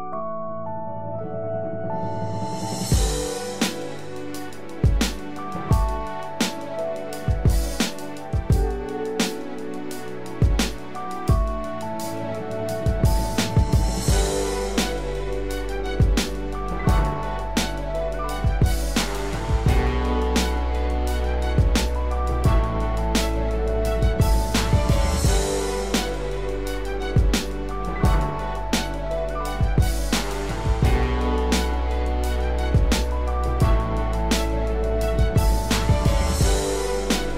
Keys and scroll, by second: 12.8 ctrl+=, 24.4 ctrl+-, 34.9 ctrl+alt+z.